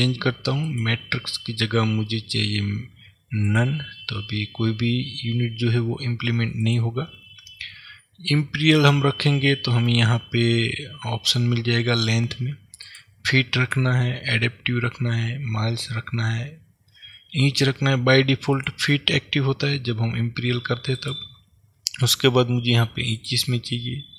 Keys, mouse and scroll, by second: 0.7-24.1 drag.